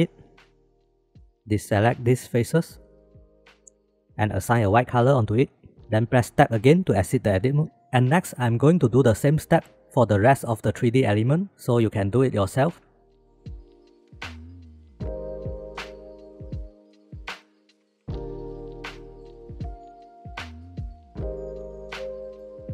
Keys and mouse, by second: 0.6 middle click, 1.4 alt+shift+z, 2.0 shift+click, 3.0 shift+click, 4.4-4.8 drag, 5.3 click, 7.3 Tab, 10.3 shift+middle drag, 12.7 ctrl+s, 13.2 Tab, 13.5 a, 14.5 middle click, 16.2 middle click, 16.8 middle click, 17.1-18.5 shift+middle drag, 18.5 shift+click, 19.0 shift+click, 20.5 click, 21.3 click.